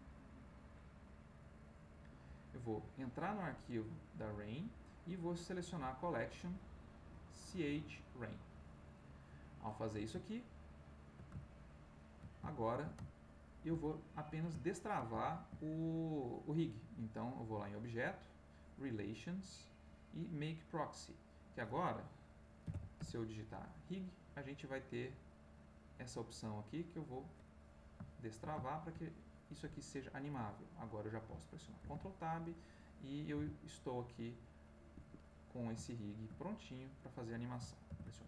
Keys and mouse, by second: 0.5 click, 1.2 click, 2.0 click, 4.0 click, 5.5 click, 5.8 click, 7.1 click, 8.3 click, 9.8-14.0 middle drag, 14.2-16.9 middle drag, 17.7 click, 20.7 click, 22.6 r, 22.9 g, 26.4 click, 27.5-29.6 middle drag, 31.8 ctrl+Tab, 32.6 click, 33.3 r, 34.9 Escape, 35.8-37.6 shift+middle drag, 38.0 ctrl+s.